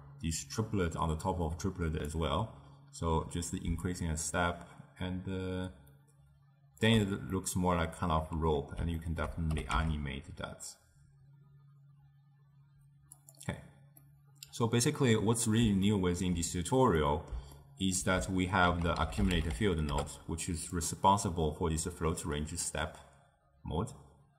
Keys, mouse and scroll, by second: 3.9-6.9 shift+drag, 7.4-9.6 middle drag, 9.6 g, 14.1-18.8 middle drag, 18.8 ctrl+a, 19.4 c.